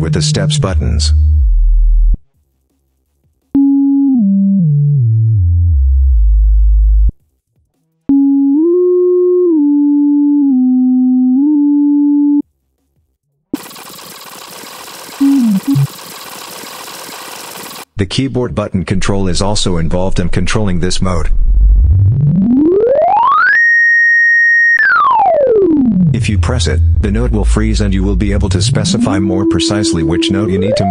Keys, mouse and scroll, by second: 0.4-0.7 scroll down 2, 1.2-1.5 scroll down 2, 2.8 click, 3.3 click, 3.9-6.2 scroll down 12, 7.8 click, 8.3-8.7 scroll up 2, 9.2 scroll down 2, 10.2 scroll down 2, 11.1 scroll up 2, 11.3 scroll down 2, 14.3 click, 15.3 scroll down 2, 15.6 middle click, 16.4 middle click, 16.9 middle drag, 17.2 click, 17.3 middle drag, 18.7-30.9 drag.